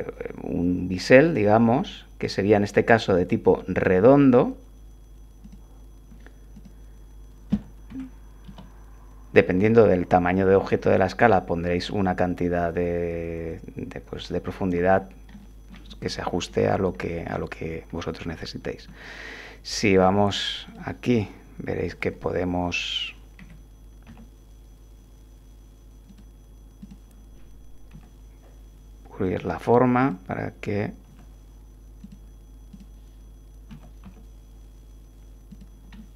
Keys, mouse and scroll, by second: 5.4 click, 6.5 click, 7.9 1, 8.5 Return, 15.3 click, 15.9 1, 17.0 shift+click, 18.9 Tab, 19.9 click, 20.6 click, 21.9 r, 23.4 Escape, 24.1 s, 26.1 click, 26.8 click, 27.9 r, 29.2 click, 30.0 click, 31.1 g, 32.0 click, 32.7 click, 33.7 g, 34.0 x, 35.5 click, 36.0-36.1 drag.